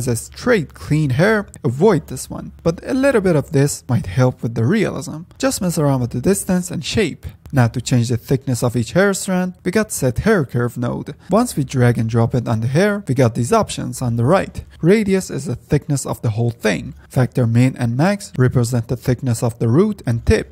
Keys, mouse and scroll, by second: 0.6 scroll up 2, 0.9 middle click, 1.3-1.7 scroll down 2, 2.3-5.3 drag, 7.5-10.1 shift+middle drag, 10.1 ctrl+s, 10.5-11.1 scroll up 4, 11.1-11.8 scroll down 2, 11.8-12.9 drag, 13.2 middle click, 13.7-14.2 drag, 14.2-15.5 scroll up 2, 16.5 scroll up 3, 16.8-17.1 middle drag, 17.1 scroll down 1, 17.4 shift+middle click, 18.0-19.4 scroll up 1, 19.4-20.5 drag.